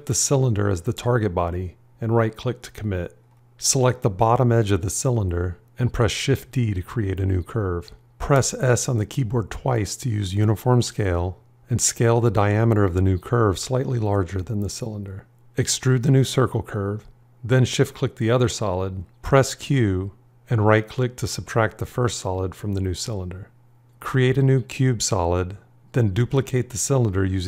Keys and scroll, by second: 6.0 shift+d, 8.0 s, 20.0 q.